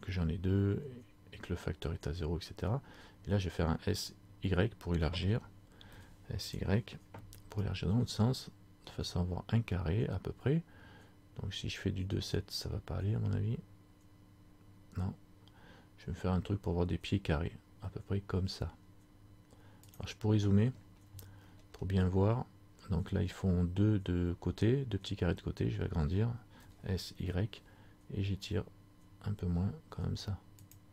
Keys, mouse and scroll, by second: 20.9-21.2 scroll up 2, 21.5-22.8 scroll up 6.